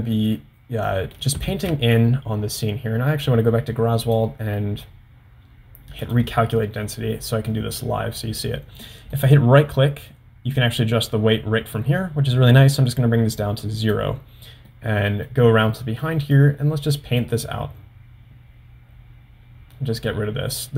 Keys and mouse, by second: 1.0 middle click, 1.9 ctrl+z, 4.0 click, 6.1 click, 7.6 middle click, 9.4-14.6 right drag, 14.7 middle click, 15.8 middle click, 16.6-20.7 drag.